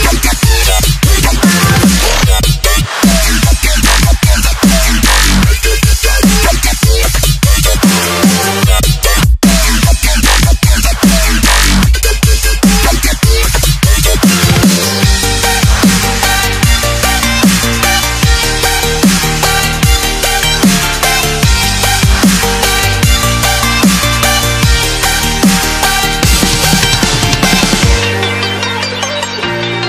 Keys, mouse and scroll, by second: 6.7 Up, 8.1 scroll down 1, 8.8 s, 10.9 s, 12.6 click, 19.4 ctrl+s, 20.8 click, 26.8 ctrl+z, 28.2 ctrl+s.